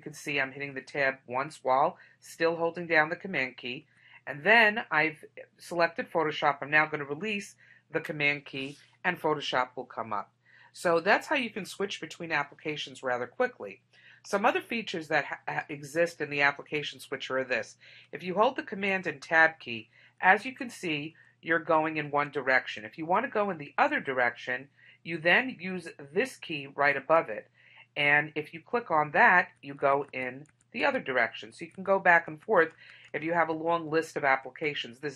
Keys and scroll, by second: 19.1 super+Tab.